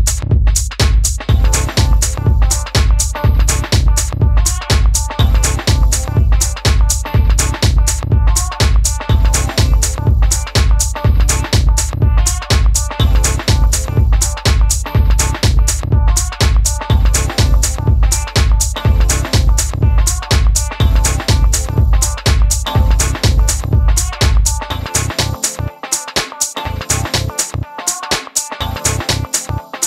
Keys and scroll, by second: 0.8 super+c, 18.5 super+z, 21.4 BackSpace, 22.3 BackSpace.